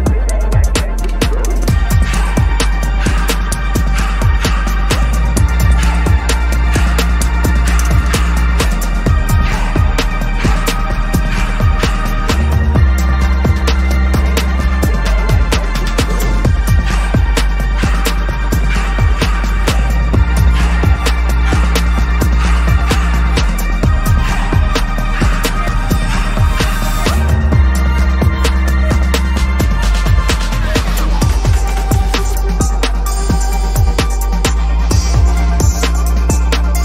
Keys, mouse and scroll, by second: 0.5 ctrl+=, 0.7 ctrl+=, 1.2 ctrl+=, 1.5 ctrl+-, 1.8 ctrl+-, 2.2 ctrl+-, 2.4 ctrl+-, 2.9 ctrl+=, 3.0 ctrl+=, 3.1 ctrl+=, 3.5 space, 4.4 ctrl+=, 4.8 ctrl+=, 4.9 ctrl+=, 5.3 ctrl+-, 5.5 ctrl+-, 5.7 ctrl+-, 5.9 ctrl+-, 6.2-7.4 scroll up 1, 7.4-8.0 scroll down 1, 8.0-8.3 scroll down 1, 8.5 shift+click, 9.1 ctrl+g, 9.8 double click, 10.9-12.6 typing, 12.9 Return, 14.7-15.6 scroll down 1, 17.2 scroll up 1, 17.3 ctrl+=, 18.3 right click, 24.7 right click, 28.3 double click, 29.2 BackSpace, 29.9 ctrl+s, 34.8 ctrl+-, 35.0 ctrl+-, 35.4 ctrl+`, 35.9-36.8 scroll down 1.